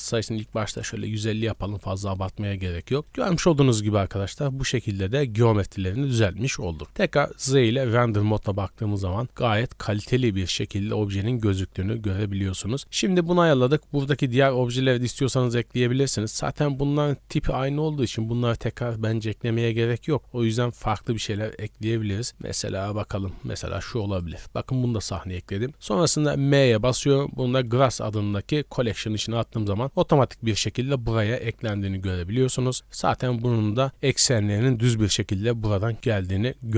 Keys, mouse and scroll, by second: 1.5 right click, 2.0-2.4 middle drag, 2.5-3.1 scroll up 2, 3.0 middle click, 3.3 shift+middle click, 3.7-6.0 middle drag, 6.2-6.5 scroll down 2, 6.7 shift+middle click, 6.8 z, 11.5-11.9 shift+middle drag, 14.0 right click, 14.6 s, 15.9 shift+right click, 16.6 x, 20.8 click, 22.4 click, 23.6 click, 26.4 m, 28.8 z, 29.7 scroll up 2, 29.8-31.4 middle drag, 31.6 z.